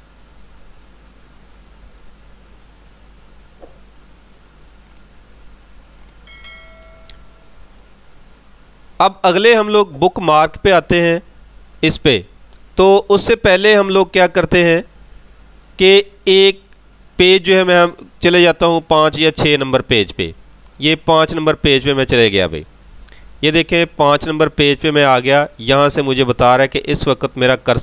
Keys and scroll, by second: 18.5 ctrl+g.